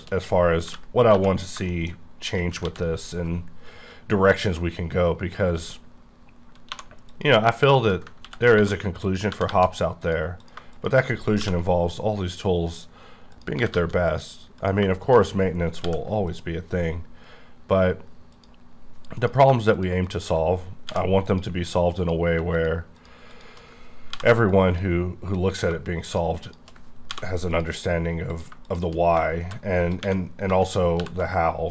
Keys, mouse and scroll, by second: 0.7 j, 1.1 j, 1.4 click, 1.7 shift+middle click, 1.8 shift+scroll down 1, 2.2 shift+click, 2.7 ctrl+x, 7.1 click, 8.2 ctrl+x, 8.5 1, 9.0 click, 9.3 g, 9.5 g, 10.0 click, 10.4 click, 10.7 shift+click, 11.4 m, 12.3 click, 13.3 click, 13.5 g, 13.7 g, 14.1 click, 14.6 click, 15.0 shift+click, 15.8 m, 16.2 click, 18.3 click, 19.1 click, 19.7 shift+click, 20.0 shift+click, 20.9 m, 21.2 click, 22.0 click, 22.5 shift+click, 23.0 shift+click, 23.3 shift+click, 24.1 m, 24.5 click, 25.5 click, 26.1 shift+click, 26.4 shift+click, 27.1 m, 27.5 click, 28.3 click, 28.6 click, 29.4 shift+e, 31.0 shift+r.